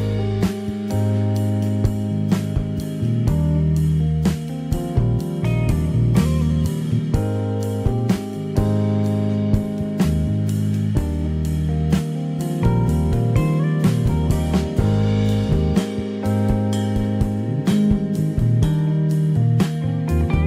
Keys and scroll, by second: 1.1 shift+r, 2.2 0, 3.0 Return, 7.3 Escape, 11.3 Escape, 14.1 Escape.